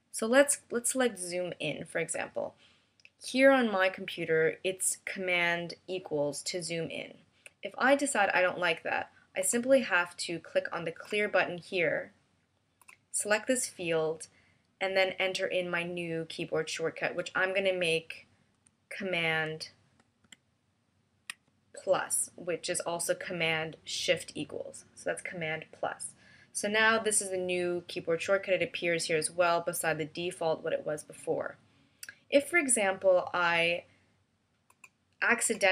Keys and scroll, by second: 20.0 shift+super+=.